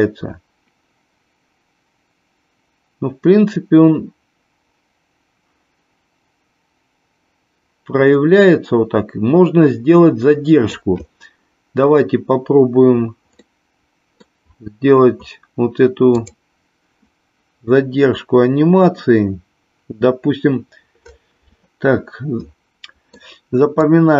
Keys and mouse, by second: 13.3-14.2 middle drag, 16.0 click, 22.7 middle click, 23.7-24.1 drag.